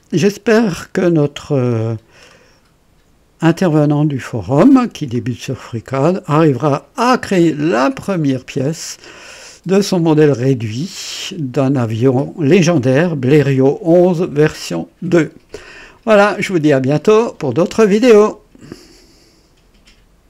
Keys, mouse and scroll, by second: 0.0 KP_1, 5.1-7.2 drag, 10.9-12.4 drag, 16.0 click, 18.6 right click, 20.2 click.